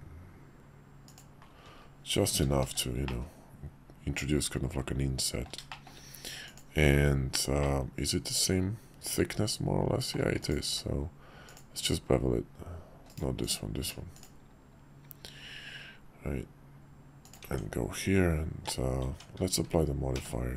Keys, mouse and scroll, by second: 2.6 shift+2, 3.0-5.5 middle drag, 5.7 shift+middle click, 6.7 q, 7.6-10.2 middle drag, 10.7 q, 13.4 click, 17.4 Tab, 20.1 q.